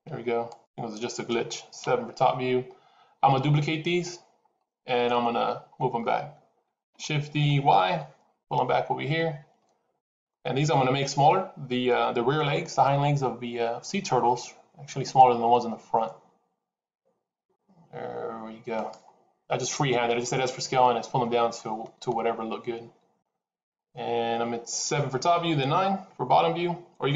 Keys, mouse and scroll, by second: 0.3 shift+click, 1.7 KP_7, 6.7 shift+d, 15.1 s, 21.4 middle click, 24.7 KP_7, 25.8 KP_9.